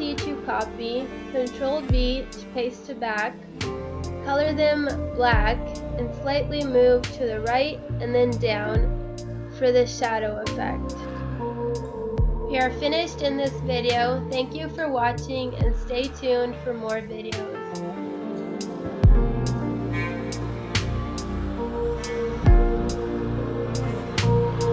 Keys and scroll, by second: 2.2 Down, 6.2 Caps_Lock.